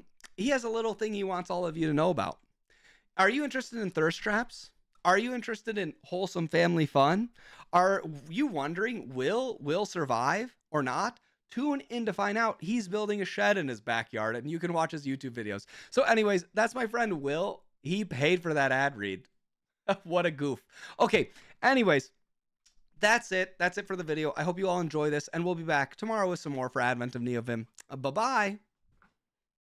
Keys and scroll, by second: 2.1 super+8, 4.2 Right, 7.1 Right, 16.5 super+7.